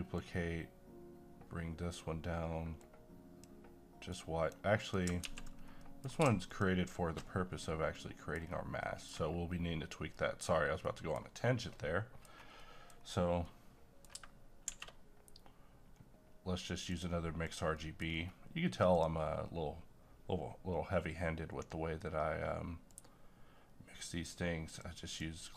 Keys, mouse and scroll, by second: 0.2-4.8 drag, 5.2 x, 5.5 scroll down 1, 5.8 middle click, 6.5 ctrl+shift+click, 7.6-8.0 scroll down 1, 8.0 middle click, 8.3 scroll down 1, 8.8 middle click, 10.5-10.9 scroll up 1, 10.9 middle click, 11.6 scroll up 1, 11.7 middle click, 13.0-13.5 scroll down 1, 13.5 middle click, 14.6 shift+a, 16.9 click, 17.8 middle click, 18.0-18.5 scroll up 2, 18.9 click, 22.9-25.5 drag.